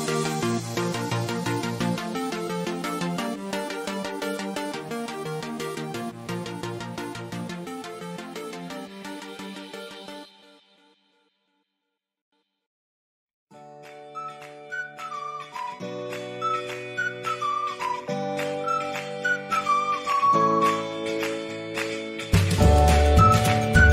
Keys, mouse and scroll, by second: 5.7 scroll down 1, 7.4 scroll down 1, 7.6 ctrl+-, 10.4 ctrl+=, 12.4 ctrl+=, 12.6-14.6 ctrl+drag, 14.6-15.3 scroll up 1, 15.3 click, 16.5 click, 17.8 scroll up 1, 18.1 click, 18.1 click, 20.0 click, 21.8 click, 23.3-23.9 drag.